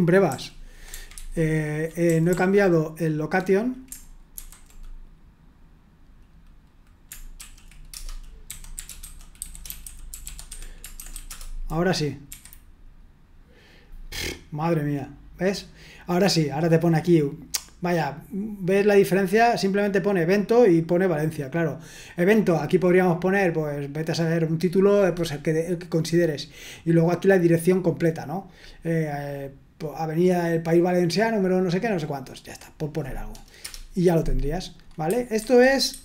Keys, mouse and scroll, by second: 0.3 k, 1.1 ctrl+u, 2.0-3.3 typing, 4.3 /, 7.4-11.5 typing, 12.2 F5, 14.6-15.2 scroll down 1, 19.9 click, 20.7 click, 33.6 Return, 34.6 click, 35.4 super+1, 35.9 super+2.